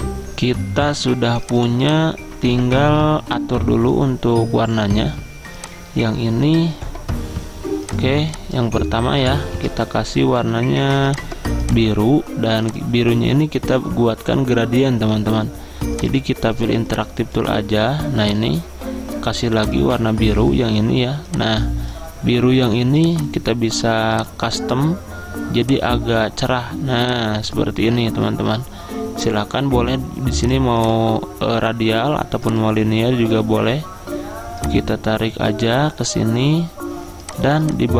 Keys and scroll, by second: 9.7 ctrl+z.